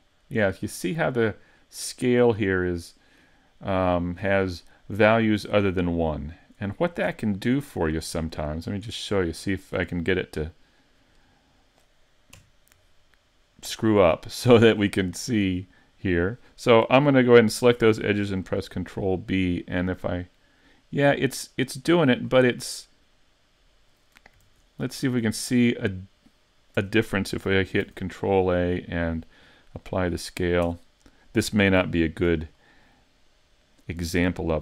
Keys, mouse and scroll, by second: 7.0 Tab, 7.4-8.0 scroll up 1, 8.0-8.4 scroll up 2, 8.4 shift+middle click, 9.3 shift+middle click, 10.0 middle click, 12.5 KP_Decimal, 13.3-14.5 scroll down 3, 14.1 shift+middle click, 15.2 middle click, 18.6 ctrl+b, 22.2 click, 22.5 middle click, 24.5 super+z, 24.8 middle click, 26.8 Tab, 27.8 ctrl+a, 30.2 middle click, 30.7 Tab, 31.0 middle click, 32.6 middle click.